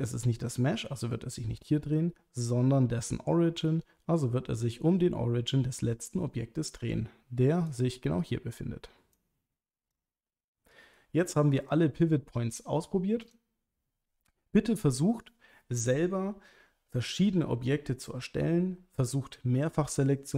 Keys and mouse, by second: 3.9 r, 7.7 right click, 9.2-9.9 drag, 11.8-13.0 drag.